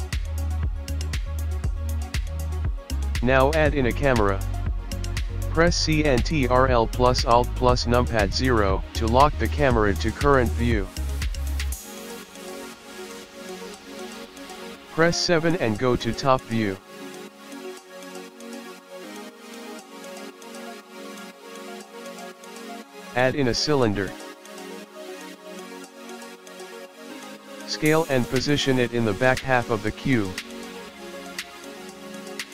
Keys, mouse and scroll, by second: 0.1 middle click, 0.1 scroll up 1, 1.3 shift+a, 1.9 click, 1.9 a, 2.3 click, 3.0 shift+a, 4.1 ctrl+alt+KP_0, 4.9 click, 5.2 g, 6.5 click, 6.7 click, 8.7 g, 10.3-12.9 typing, 11.2 click, 12.2 click, 13.2 click, 14.0 scroll up 4, 14.1 middle click, 14.2 KP_7, 15.3-17.0 scroll up 12, 21.0 a, 22.2 click, 23.3 shift+a, 27.8 s, 30.6 g, 30.9 g.